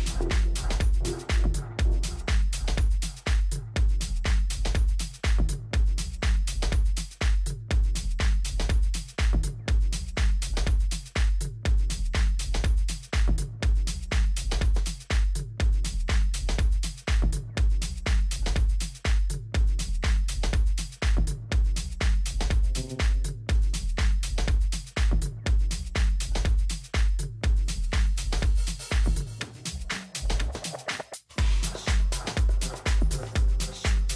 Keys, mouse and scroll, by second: 2.4 a, 3.1 a, 4.1 Tab, 7.9-9.5 middle drag, 11.9-14.9 middle drag, 12.5 a, 16.0-17.9 drag, 18.8 a, 19.2 a, 20.1 a, 20.6 a, 22.9-26.3 middle drag, 31.1-33.9 middle drag.